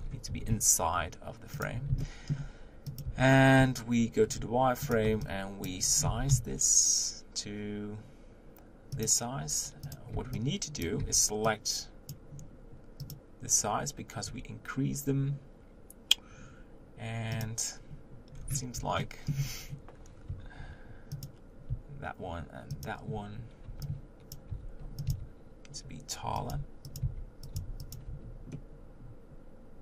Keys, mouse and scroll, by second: 0.0-0.3 scroll up 3, 0.3 g, 1.1-3.1 middle drag, 3.1 Tab, 4.3 z, 4.9 click, 5.0 b, 5.9 scroll down 2, 6.1 g, 9.9 click, 10.8 b, 12.1 b, 13.1-14.4 drag, 17.4 click, 18.3-19.0 scroll down 1, 19.0-20.3 shift+middle drag, 20.3 3, 21.2 click, 22.9 shift+click, 24.3 b, 24.5 g, 25.1 s, 26.5 g, 27.0 s, 27.5 g, 28.1 Tab, 28.6-29.8 middle drag.